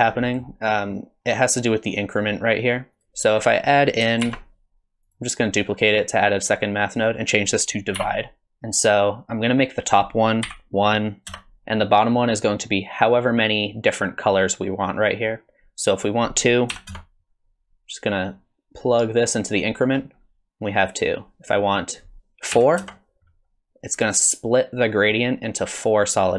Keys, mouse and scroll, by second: 0.0 scroll down 3, 0.3 middle click, 2.9 click, 3.4 click, 4.2 shift+d, 7.4 click, 8.4 middle click, 10.0 click, 16.1 click, 18.3 click, 21.9 click.